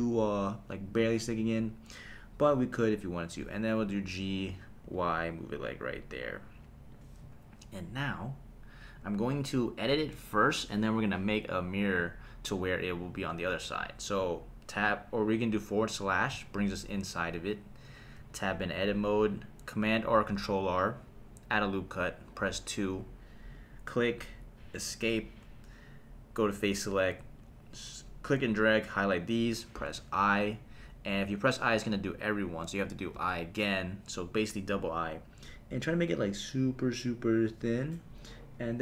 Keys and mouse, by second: 4.2 g, 4.8 y, 6.9 click, 15.8 /, 18.2 Tab, 20.2 super+r, 24.6 Escape, 26.4 click, 27.6-29.0 drag, 29.8 i, 33.1 i, 37.8 click.